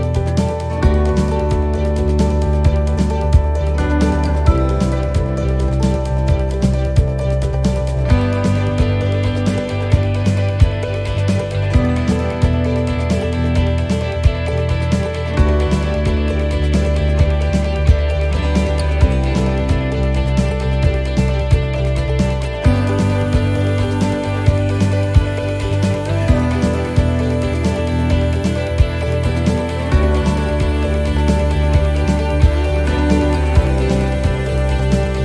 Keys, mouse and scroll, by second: 1.9 alt+shift+right click, 3.2 e, 3.6 s, 4.7 middle click, 7.0 ctrl+r, 9.1 ctrl+r, 11.0 alt+shift+right click, 11.8 e, 12.2 s, 13.8 middle click, 14.3-14.6 scroll down 2, 14.7 middle click, 15.8-16.2 scroll up 3, 16.2 middle click, 17.3 middle click, 17.3 scroll down 1, 18.5 right click, 19.5 l, 20.7 s, 23.4 middle click, 24.7 middle click, 25.0-25.4 scroll down 2, 25.4 middle click, 25.7-26.8 scroll down 7, 26.8 middle click, 27.2-28.4 scroll up 10, 28.4 shift+middle click, 29.9 ctrl+r, 31.7 s, 33.6 click.